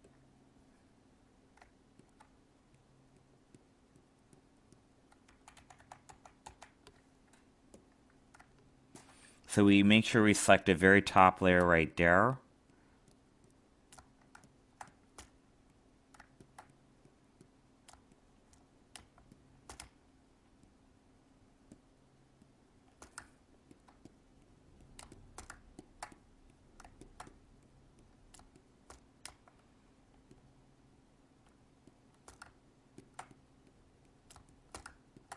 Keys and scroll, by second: 5.2 ctrl+z, 14.3 alt+space.